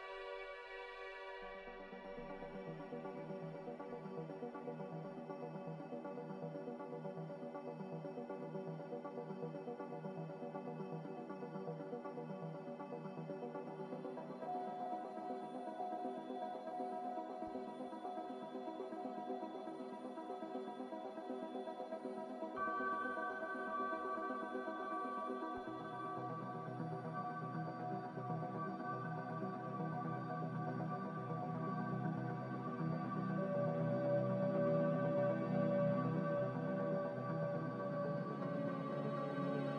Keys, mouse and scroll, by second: 5.0 click, 5.4 click, 8.8 click, 11.6 click, 30.9 ctrl+z.